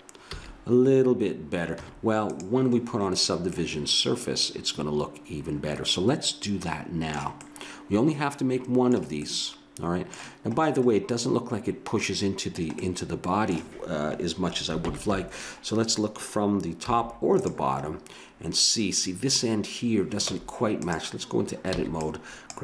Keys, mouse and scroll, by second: 0.2 a, 1.8 Tab, 3.7 middle click, 5.1 middle click, 7.4-13.1 middle drag, 14.8 ctrl+KP_1, 16.8 z, 20.3 Tab, 21.8 b.